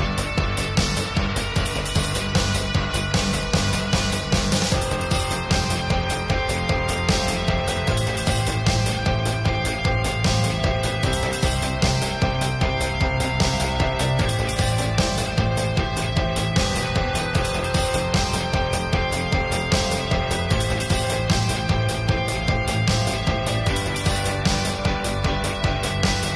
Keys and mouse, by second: 0.0 drag, 0.2 middle click, 0.8-1.1 drag, 1.1 ctrl+s, 2.6-2.9 [, 3.8 click, 4.2-4.8 middle drag, 4.4-4.8 drag, 5.2-5.7 drag, 5.5 middle click, 5.8-7.1 drag, 5.8-6.6 middle drag, 6.9 middle drag, 7.4-10.3 drag, 7.4-8.7 middle drag, 10.3 middle click, 10.5-11.0 drag, 11.8-12.3 drag, 12.3-12.7 middle drag, 12.9 drag, 14.3-15.2 drag, 15.5-16.1 drag, 16.2 click, 17.2 click, 17.3-17.9 middle drag, 17.7-18.5 drag, 19.4 ], 20.3-21.0 middle drag, 21.2 middle click, 21.8 ], 22.0 click, 23.0-25.2 middle drag, 25.4 middle click, 25.7-26.3 drag.